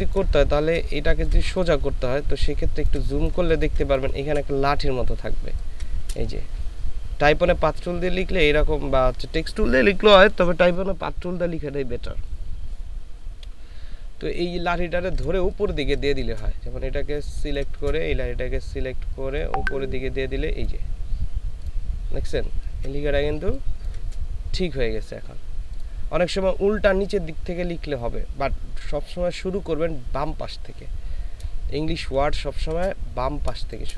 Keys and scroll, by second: 0.4 ctrl+space, 0.9 ctrl+space, 2.3 space, 5.4 space, 15.5 ctrl+space, 17.2 ctrl+space, 22.6 ctrl+space, 23.4 ctrl+space, 31.8 space.